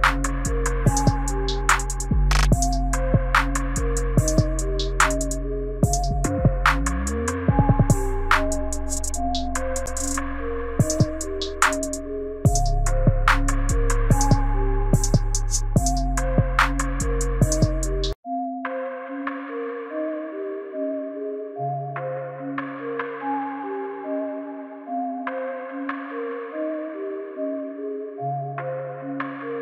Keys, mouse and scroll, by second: 2.4 space, 3.0 right click, 5.7 space, 9.8 space, 10.3 right click, 16.6 space, 21.5 space, 22.1 right click.